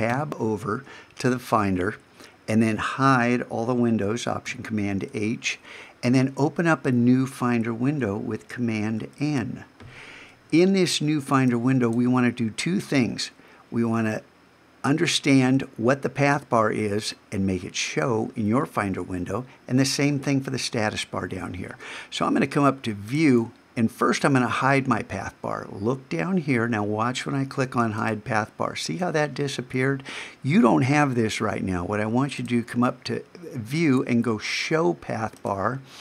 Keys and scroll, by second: 0.1 super+Tab, 4.5 alt+super+h, 9.0 super+n.